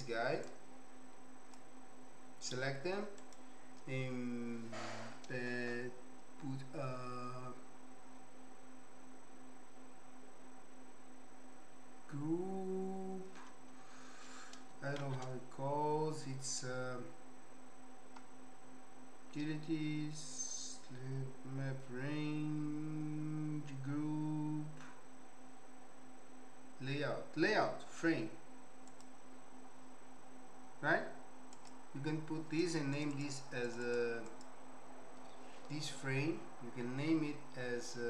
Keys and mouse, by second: 0.6-1.8 drag, 3.2-13.3 right drag, 15.0 shift+a, 31.7 typing, 32.6 click, 32.9 click, 33.6 click, 34.3 click, 37.1 n, 37.6 n.